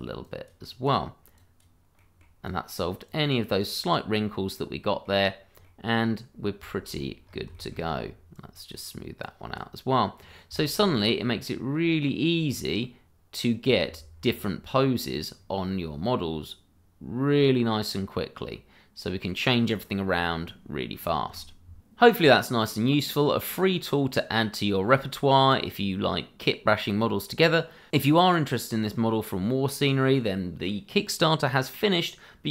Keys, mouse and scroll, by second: 0.8 double click, 1.4 click, 2.0 middle click, 2.4 click, 4.2-4.5 scroll down 1, 4.5 middle click, 5.3 scroll down 1, 5.6 middle click, 6.3-6.7 scroll down 1, 6.7 shift+middle click, 6.9 middle click, 7.3 scroll up 1, 7.5 shift+middle click, 7.9-8.3 scroll up 1, 8.3 click, 9.8 scroll down 1, 10.6 shift+middle click, 10.9 middle click, 12.5-12.8 scroll down 1, 12.8 middle click, 14.1 scroll up 1, 15.4-15.7 scroll down 1, 15.7 middle click, 17.8-18.5 scroll up 1, 18.5 middle click.